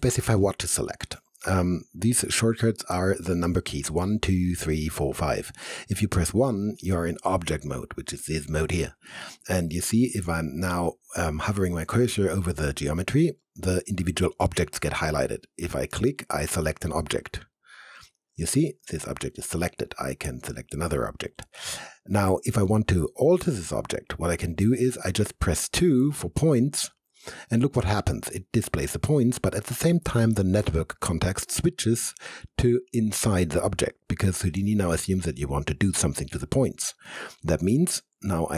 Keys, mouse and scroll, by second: 6.3 1, 9.9 1, 10.2-11.5 alt+drag, 15.5 click, 17.5 click, 20.5 click, 25.8 2, 37.1 alt+middle click, 37.7-38.5 alt+right drag.